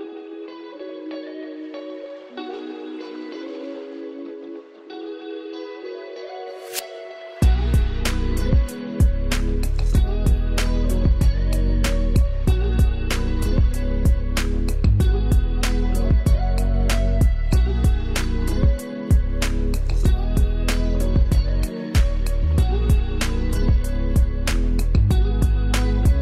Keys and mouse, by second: 4.8 ], 6.9 click, 15.5 ctrl+space, 15.9 ctrl+alt+click, 21.4 ctrl+space, 21.7 ctrl+alt+click.